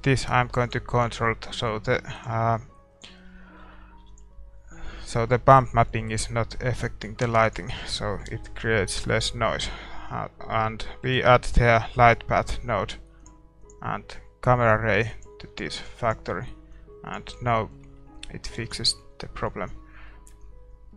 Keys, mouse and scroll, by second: 3.0-5.8 drag, 3.3-15.2 middle drag, 5.8 ctrl+s, 15.2-18.5 drag, 17.5-20.9 middle drag, 18.7 ctrl+s.